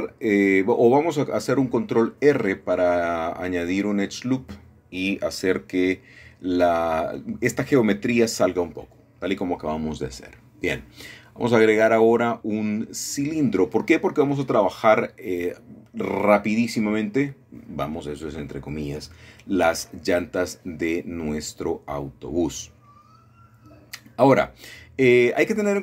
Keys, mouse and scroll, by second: 0.8-2.3 shift+middle drag, 2.7 shift+middle click, 4.0 middle click, 6.2 ctrl+r, 6.7 click, 8.7 click, 9.8-10.2 scroll down 2, 10.7-11.1 scroll down 1, 11.2 shift+middle click, 12.9-14.6 middle drag, 14.6 scroll down 2, 15.7 middle click, 16.7 middle click, 16.9 Tab, 17.8 a, 17.9 a, 18.7 scroll down 1, 22.3 shift+a, 24.7 click, 24.9 middle click.